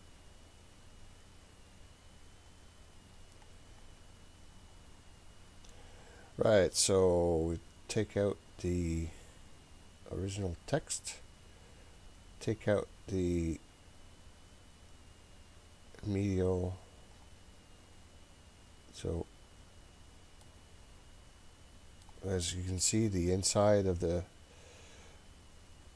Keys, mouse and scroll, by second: 10.9 click, 16.5 click, 20.4-22.1 middle drag, 22.3-23.2 scroll up 2, 23.2-24.4 scroll up 1, 25.7-25.9 scroll down 2.